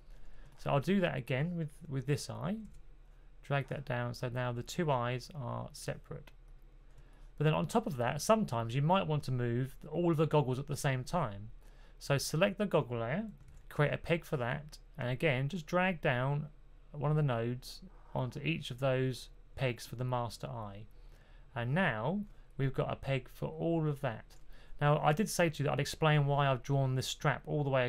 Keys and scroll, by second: 2.5 super+p, 13.4 super+p.